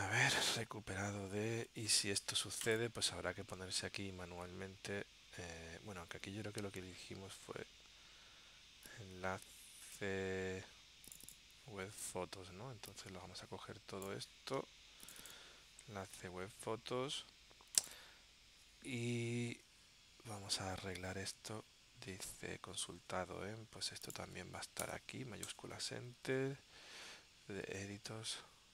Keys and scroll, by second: 0.0 super+Tab, 1.4 super+Tab, 19.7 super+Tab, 23.2 super+Tab, 25.6 shift+Return, 26.5 super+Tab, 27.9 super+Tab.